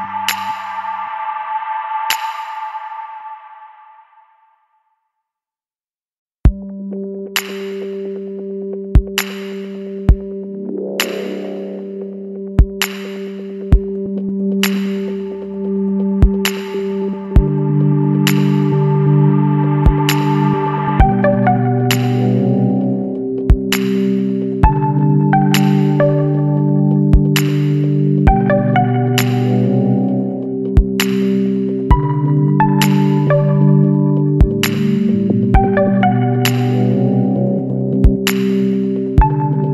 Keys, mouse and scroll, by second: 1.6 click, 2.8 click, 4.7 click, 6.3 click, 7.4 Escape, 8.9 click, 10.0 click, 11.0 KP_7, 11.3 KP_2, 11.6 KP_Enter, 14.3 click, 15.8 click, 16.9 KP_6, 17.9 KP_Enter, 18.8-19.5 scroll down 3, 20.2 scroll up 2, 20.8-21.2 scroll up 2, 23.4 click, 25.2 click, 26.5 click, 27.1 Escape, 28.0 click, 30.4 click, 32.0 KP_2, 32.2 KP_Decimal, 32.8 KP_5, 33.1 KP_Enter, 36.1 click, 37.5 click, 38.9 KP_7, 39.2 KP_2.